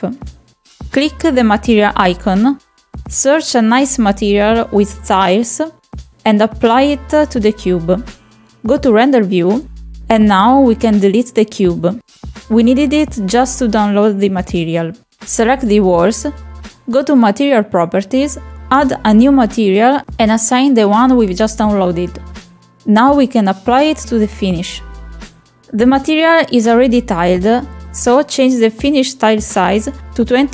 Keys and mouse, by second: 0.5 click, 0.8 click, 1.4-2.6 drag, 8.3 click, 9.8 click, 11.9 Delete, 12.3 click, 15.6 click, 18.7 click, 20.2-21.6 drag, 23.4-24.4 drag, 28.9 shift+middle click.